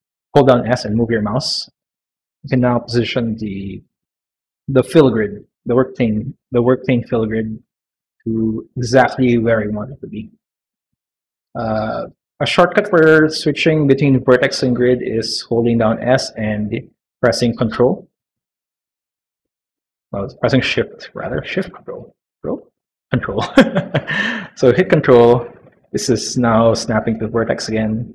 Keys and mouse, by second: 12.7 s, 14.7 s.